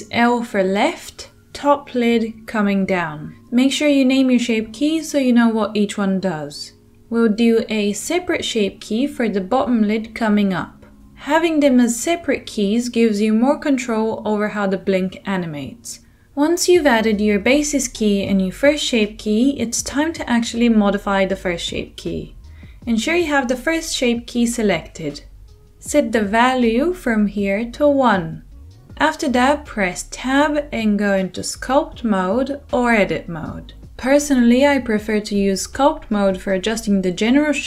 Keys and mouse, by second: 2.2-13.5 middle drag, 13.3-22.7 drag, 22.7-26.2 middle drag, 26.2-37.6 drag, 31.6 Tab, 36.2 Tab.